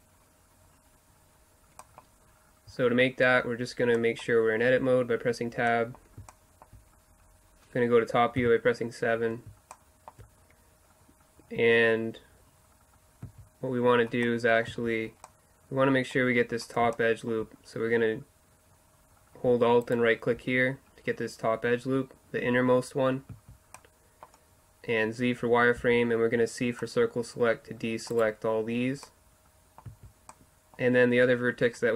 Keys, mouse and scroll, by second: 1.8 middle click, 2.8 Tab, 6.7 middle click, 8.5 KP_7, 9.8-11.6 middle drag, 12.1-13.3 middle drag, 13.3 z, 14.7 z, 15.1 middle click, 15.4 middle click, 15.7 middle click, 16.5 middle click, 19.9-21.7 right drag, 21.7-23.2 middle drag, 23.3-26.5 middle drag, 23.3 z, 25.8 c, 29.1-30.7 middle drag, 30.1 z.